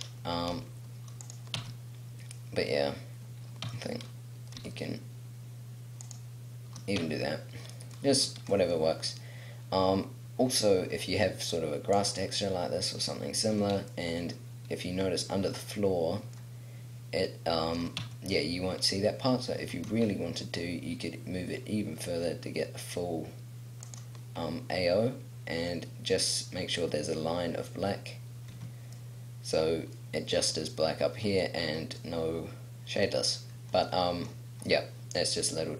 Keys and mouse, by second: 0.3 g, 1.4 click, 1.6 Tab, 3.8 Tab, 4.6 s, 6.1 click, 7.0 Tab, 7.9-9.5 middle drag, 9.6 middle click, 9.8 middle click, 11.5 middle click, 12.1 middle click, 15.0 middle click, 15.2 middle click, 15.7 middle click, 18.0 Tab, 19.6 g, 24.0-25.1 middle drag, 28.5 Tab, 29.2 click, 29.8-32.1 middle drag, 33.3 middle click.